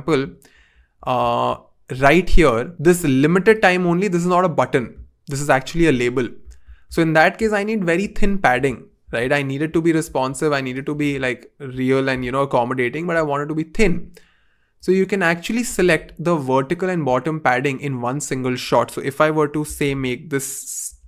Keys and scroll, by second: 19.9-21.0 typing.